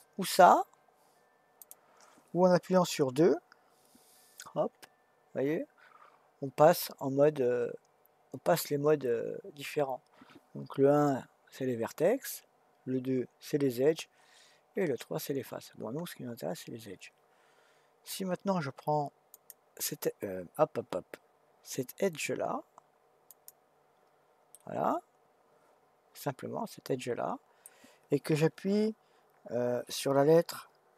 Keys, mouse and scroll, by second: 1.6 click, 4.5 2, 11.7 1, 13.1 2, 14.7 3, 16.0 2, 19.3 click, 23.3 click, 24.5-27.6 middle drag.